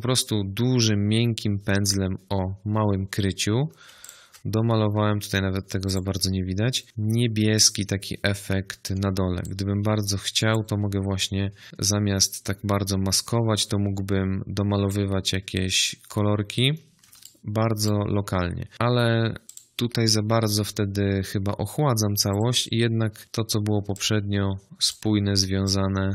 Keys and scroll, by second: 11.6 ctrl+z.